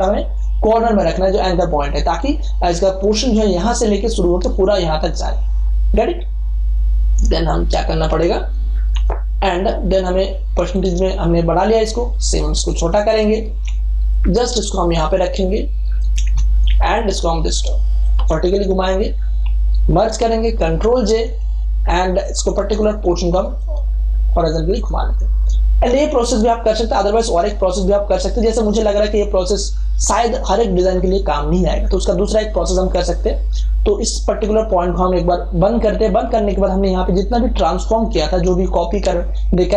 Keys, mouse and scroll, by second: 8.9 super+Escape, 10.6 click, 12.0 ctrl+space, 12.2 ctrl+click, 13.4 v, 14.0-16.6 alt+drag, 16.6 ctrl+t, 16.9 ctrl+right click, 18.0 click, 18.1 Return, 20.1 ctrl+e, 20.6 ctrl+j, 21.0 ctrl+t, 22.2 alt+click, 23.6 right click, 24.7 click, 25.8 Return, 35.7 click.